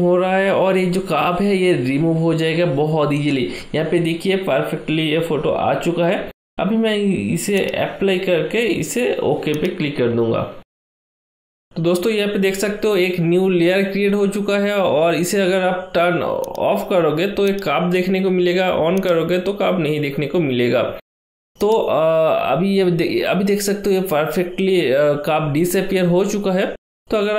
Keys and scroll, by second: 15.8 ctrl+d.